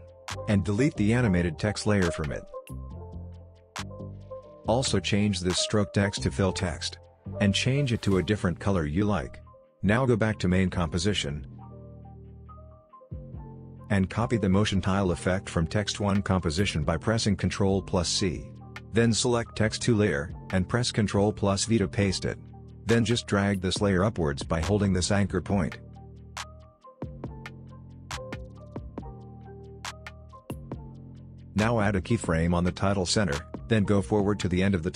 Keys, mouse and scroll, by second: 3.9 click, 10.0 click, 13.4 click, 18.4 ctrl+c, 19.3 click, 19.5 click, 20.6 ctrl+v, 23.7-25.9 drag, 26.6-27.3 alt+scroll up 1, 28.0-28.5 alt+scroll down 1, 30.3 Down, 30.9-31.2 scroll down 1, 31.2-32.1 ctrl+drag.